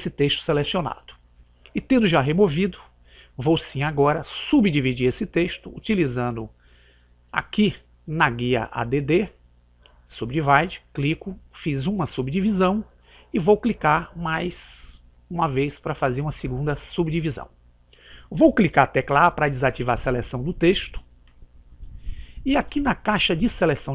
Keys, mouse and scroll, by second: 10.7 click, 15.0 click, 20.8 a.